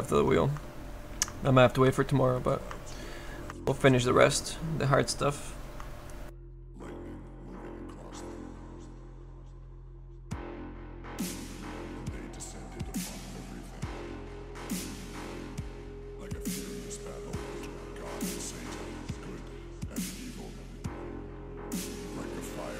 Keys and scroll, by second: 7.1 s, 7.9 s.